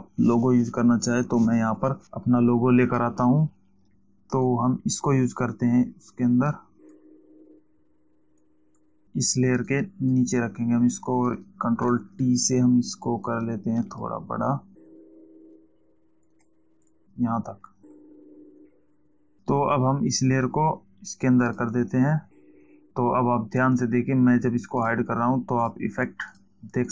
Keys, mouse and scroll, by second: 5.0 click, 8.7 click, 10.2 click, 12.3 ctrl+t, 13.8 click, 17.2 click, 21.9 alt+click, 25.3 click.